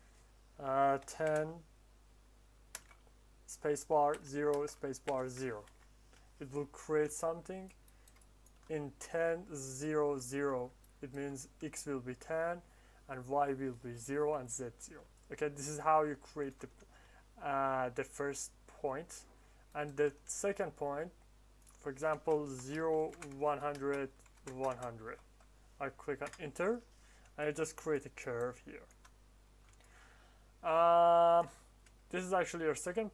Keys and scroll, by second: 0.9 1, 1.2 0, 2.6 space, 4.0 0, 4.4 space, 5.0 0, 5.5 Return, 22.5-25.0 typing, 26.2 Return.